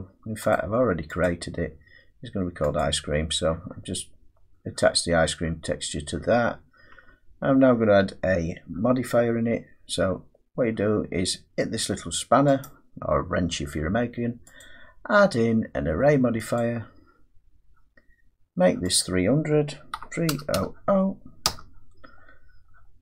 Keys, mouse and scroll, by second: 1.7 click, 2.8 click, 7.0 Tab, 12.6 click, 14.6 click, 16.9 click, 19.0 click, 19.9-20.3 typing, 21.5 Return, 22.4-23.0 scroll.